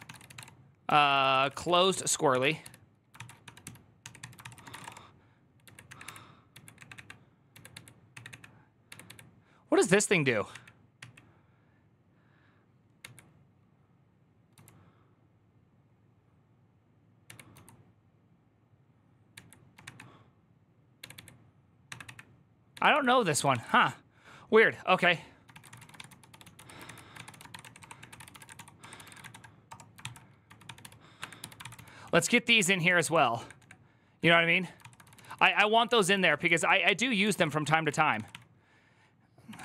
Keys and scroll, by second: 0.0-8.8 typing, 10.3-10.8 typing, 12.8 typing, 14.3 typing, 20.8-39.6 typing, 37.7 Tab, 37.9 ctrl+c.